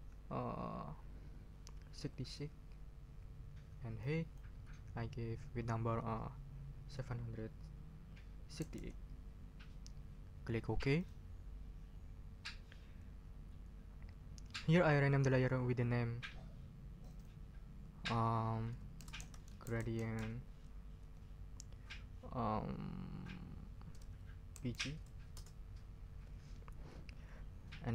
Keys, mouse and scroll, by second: 1.9 6, 4.0 click, 6.9 7, 8.3-9.2 typing, 10.9 click, 17.0 click, 18.7-20.6 typing, 24.3-25.2 typing, 25.3 shift+Return.